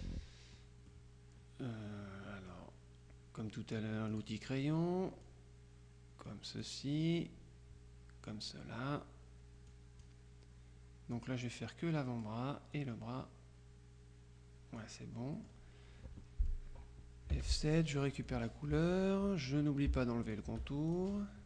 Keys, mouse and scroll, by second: 4.2 click, 5.3-7.2 drag, 7.3-8.9 drag, 9.8 click, 11.2-12.8 drag, 15.4 middle click, 16.0-16.5 scroll up 1, 17.4 F7, 18.3 click, 18.8 F2, 20.3 shift+click, 21.0 shift+click.